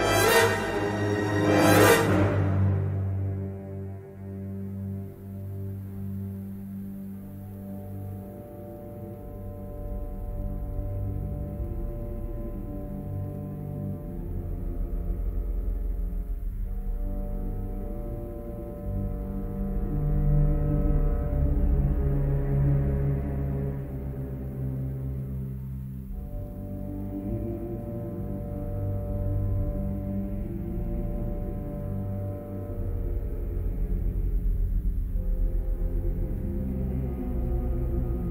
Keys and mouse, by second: 1.5 middle click, 2.3 shift+middle click, 2.7 middle click, 3.5 middle click, 3.7 a, 7.5 b, 9.0 g, 10.3 middle click, 11.2 middle click, 15.9 3, 16.9 g, 22.9 g, 25.9 shift+click, 27.0 g, 28.7 middle click, 29.6 3, 31.4 g, 35.6 middle click, 36.7-38.3 middle drag.